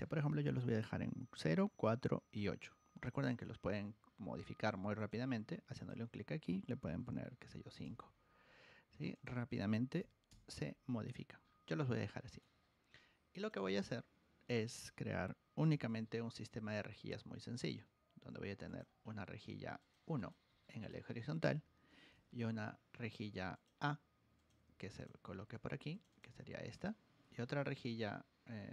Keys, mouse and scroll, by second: 4.3 middle click, 4.4-4.8 scroll up 4, 4.6 middle click, 4.9 click, 5.7 click, 9.1 click, 11.0-11.4 scroll down 2, 11.4 scroll up 1, 12.1 middle click, 13.3 click, 13.5 click, 15.7 g, 17.5 click, 18.6 click, 18.9 middle click, 18.9 scroll up 2, 19.7 click, 20.1 click, 20.5 1, 20.8 click, 21.2 Escape, 22.0 g, 23.5 click, 24.3 click, 24.6 Escape, 24.9 click, 25.2 Escape, 25.9 click, 26.0 click, 26.3 shift+a, 26.7 click, 27.2 g.